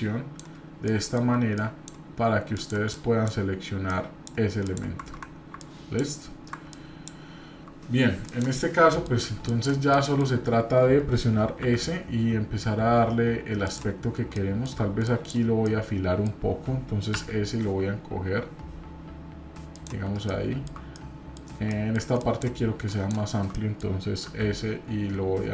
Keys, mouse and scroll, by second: 9.9 shift+middle click, 15.6 middle click, 20.9 middle click, 23.5 middle click.